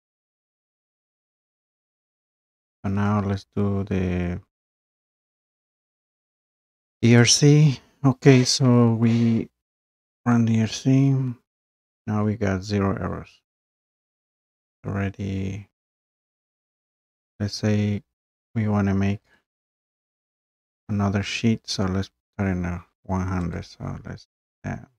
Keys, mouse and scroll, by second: 0.4 click, 1.1-1.6 scroll down 2, 3.1-3.4 scroll, 7.2 click, 10.2 click, 19.3 click, 23.6 click.